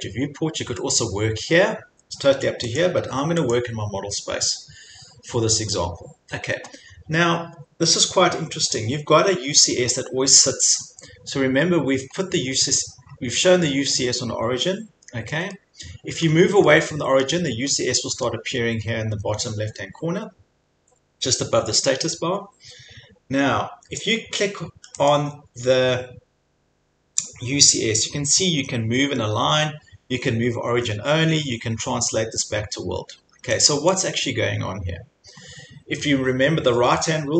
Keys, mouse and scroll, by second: 2.8 click, 3.5 click, 10.6-11.3 scroll, 11.9-12.9 scroll, 13.0-13.4 scroll, 16.4 middle click, 17.2 middle click, 18.0 scroll, 23.2 scroll, 25.2 click, 33.7 click, 34.0 click, 34.3-35.0 scroll, 35.2 scroll, 35.4 scroll down 2.